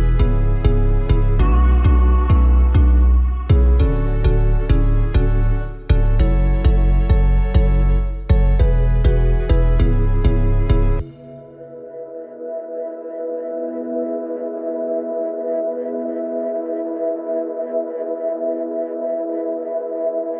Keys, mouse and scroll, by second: 11.8 click, 14.0 click, 14.7-16.1 drag, 16.4-17.0 scroll down 2, 17.6-18.3 drag, 18.8 click.